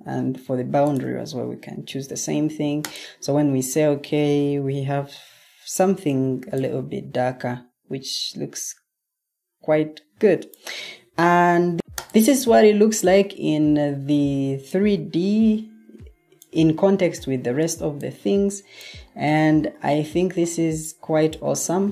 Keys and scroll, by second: 5.0 Escape, 6.3 o, 12.6 super+Tab.